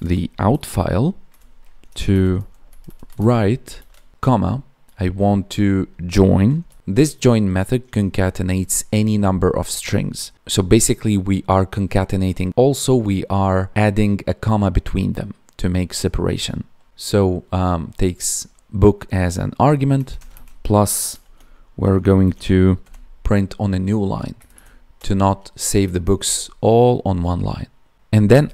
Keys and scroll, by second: 1.2 Tab, 16.9 Right, 19.9 space, 20.2 space, 24.3 Right, 25.9 ctrl+s, 28.3 Right.